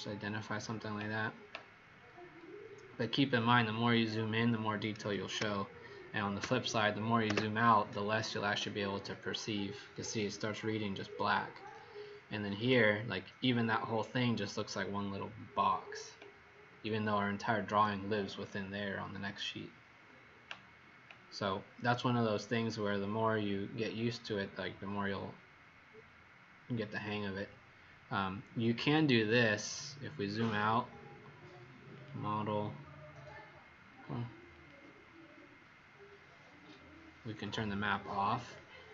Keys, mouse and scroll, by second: 3.5-4.3 alt+scroll down 6, 5.3 ctrl+-, 9.0 click, 9.4 click, 11.3 click, 12.0 click, 17.0 click, 17.7 click, 26.9 click, 28.8-29.6 scroll down 5, 31.8 click.